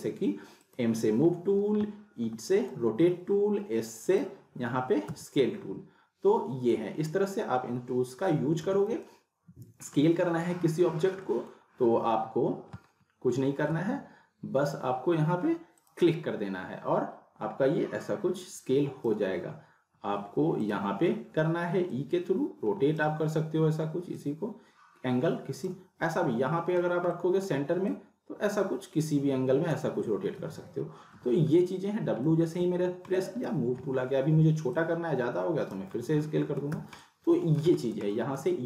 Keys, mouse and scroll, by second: 0.6 click, 0.7 click, 2.2 e, 2.5 click, 3.6 e, 4.0 click, 5.1 s, 6.7-7.3 middle click, 7.4 scroll down 1, 7.8-8.6 typing, 9.0-10.0 alt+middle drag, 13.7 s, 15.8 click, 18.0-19.3 drag, 20.0 r, 20.6 click, 23.2 scroll down 1, 24.2-25.7 drag, 26.9 scroll down 1, 27.2-27.7 alt+middle click, 28.0-29.8 drag, 30.2 ctrl+z, 31.1 w, 32.0 scroll down 1, 32.3 middle click, 33.1 alt+middle click, 34.0 r, 35.1-36.0 click, 35.8 w, 36.0-36.6 alt+middle click, 36.7 z, 37.0-37.6 middle click, 37.8 scroll down 1, 38.1 alt+middle click, 38.2 alt+middle click.